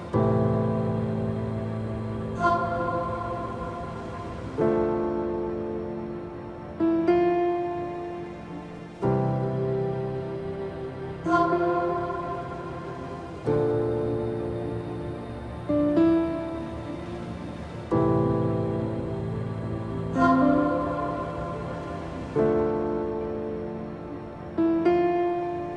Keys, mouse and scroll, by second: 12.7 alt+click, 14.5 alt+scroll up 1, 16.2 alt+click, 17.4 scroll down 1, 19.0-21.1 drag, 21.1 alt+scroll down 1, 22.5 click, 24.1 click.